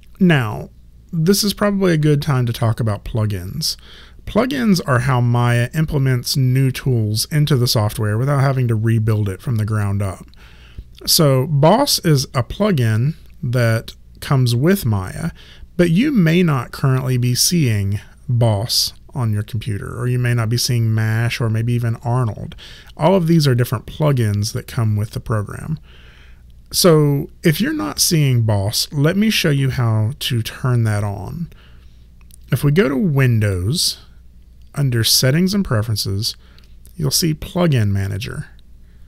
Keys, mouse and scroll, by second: 33.5 click.